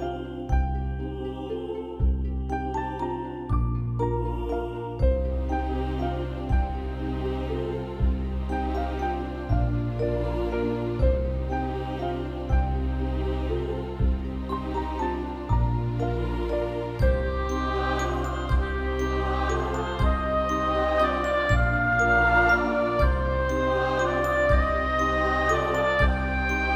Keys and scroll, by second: 10.5 ctrl+=, 10.5 ctrl+=, 10.6 ctrl+=, 10.7 ctrl+=, 11.1 space, 13.3 Down, 13.3 Down, 13.5 Down, 13.7 Up, 15.1-16.0 typing.